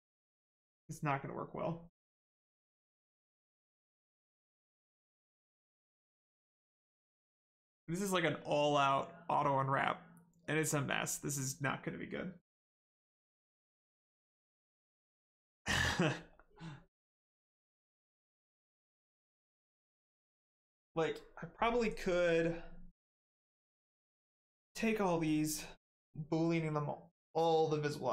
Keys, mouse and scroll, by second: 3.2 right click.